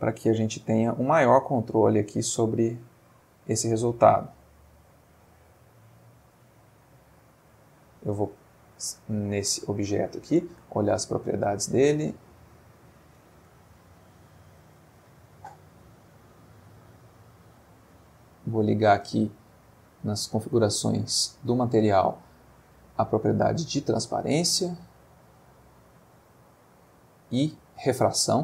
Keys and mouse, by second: 0.7-1.7 drag, 4.7-5.3 drag, 5.8 click, 10.2 click, 12.3 click, 16.3 click, 17.2 click, 17.8 click, 19.1 click, 25.3 click, 26.2 click.